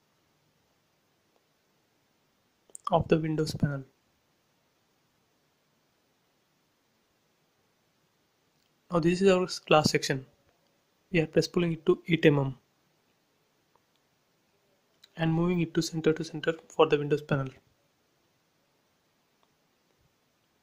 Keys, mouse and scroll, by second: 0.2 scroll down 1, 1.5 Left, 1.6 scroll down 1, 3.2-3.6 scroll up 1, 5.0 click, 5.1 space, 5.3 scroll down 1, 6.8 click, 9.2 right click, 9.9 click, 11.1 scroll up 1, 11.9 p, 12.1 click, 13.3-14.9 typing, 14.1 Return, 14.7 click, 15.4 click, 15.9-16.4 scroll up 1, 16.4 scroll up 1, 18.0 m, 19.3 click, 19.7 scroll down 1.